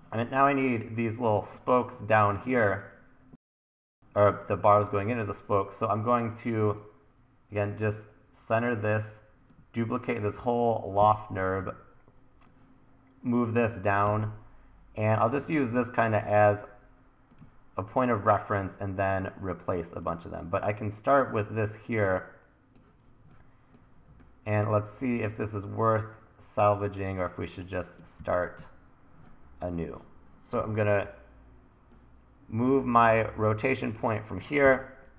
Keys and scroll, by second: 1.3 1, 3.3 1, 11.0 e, 11.6 w, 14.1 r, 16.4 super+z, 28.2 e, 28.6 w, 30.6 l, 34.6 l.